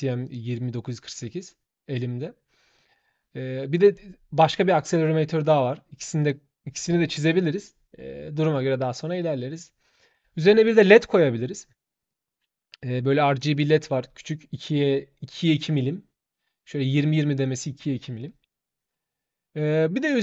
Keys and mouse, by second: 0.0 click, 2.5 click, 5.3 click, 6.0 click, 9.7 click, 11.8-12.8 drag, 13.0 click, 16.7 click, 17.9 click.